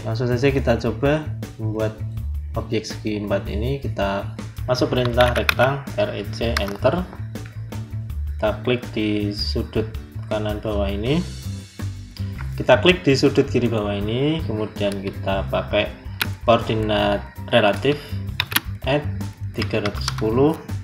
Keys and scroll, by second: 4.6-5.8 typing, 6.4 Return, 18.3 shift+2, 19.4 3.